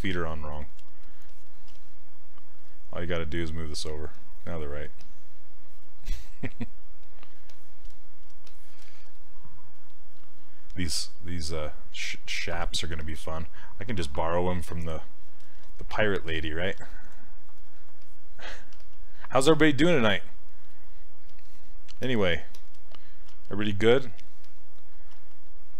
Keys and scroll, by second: 1.7 s, 12.0 s, 13.0 s, 18.8 s, 23.3 s, 25.2 s.